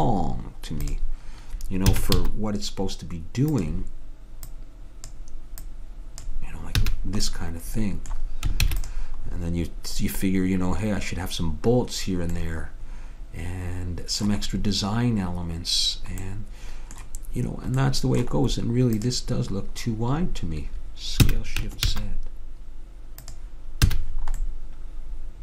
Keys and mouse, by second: 0.9-2.7 drag, 2.0 s, 4.6-7.6 drag, 6.9 a, 8.8 ctrl+s, 13.6-17.6 middle drag, 19.1-20.7 drag, 21.3 s, 23.9 a.